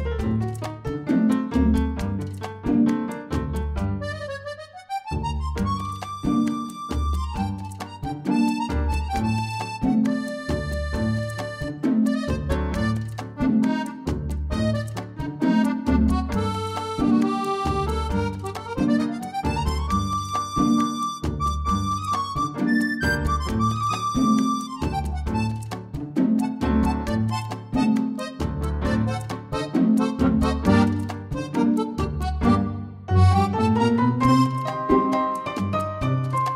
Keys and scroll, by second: 7.9 ctrl+k, 8.2 ctrl+Right, 8.6 typing.